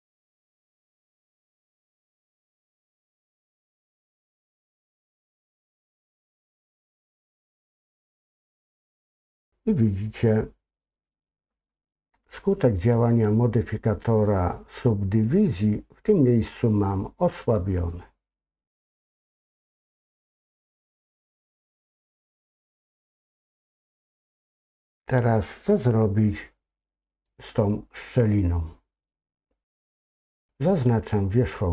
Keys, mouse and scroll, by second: 3.6 ctrl+r, 17.3-19.8 middle drag, 20.2 middle click, 20.9 click, 21.3 middle click, 22.6 shift+middle click, 23.4 middle click, 24.2 scroll down 2, 24.2 scroll up 2.